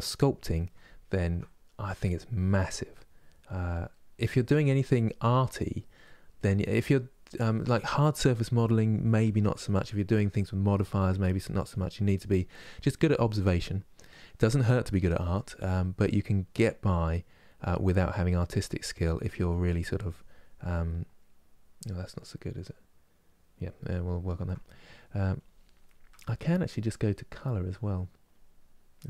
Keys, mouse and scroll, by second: 1.7-3.6 drag, 3.6 middle click, 4.1-5.7 drag, 5.7 middle click, 6.2-7.7 drag, 7.7 middle click, 8.2-10.1 drag, 10.1 middle click, 10.5 click, 11.0 middle click, 11.4 click, 12.0 middle click, 12.5-14.7 drag, 14.7 middle click, 15.2 click, 16.0-17.6 middle drag, 17.6 click, 18.4 middle click, 18.8 click, 19.2 middle click, 19.6-20.6 drag, 20.6-24.8 middle drag, 24.8-27.1 drag, 27.1-29.0 middle drag.